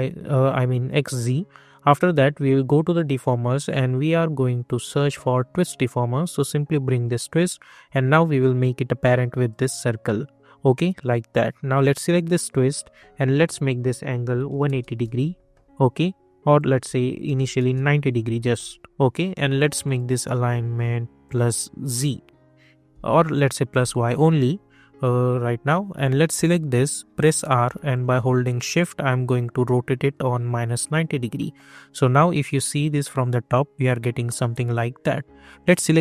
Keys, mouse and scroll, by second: 2.5-5.3 drag, 6.3-11.8 drag, 11.8 click, 15.0 Return, 16.5 click, 17.5 Return, 19.8-23.2 drag, 26.3 click, 27.1 r, 27.9-30.7 drag, 30.7 click, 31.3 middle click, 35.5 click.